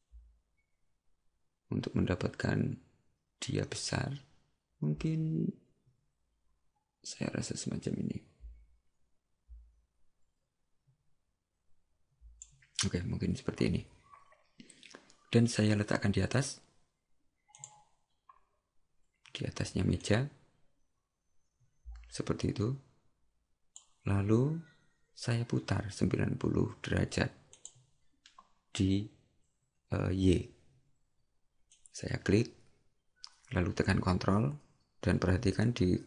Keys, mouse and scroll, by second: 17.6 click, 27.6 click, 31.8 click.